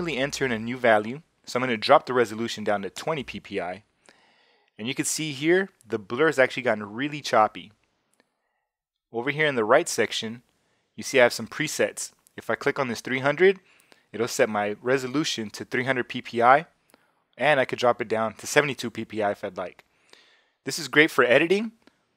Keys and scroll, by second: 0.1 0, 2.9 Return.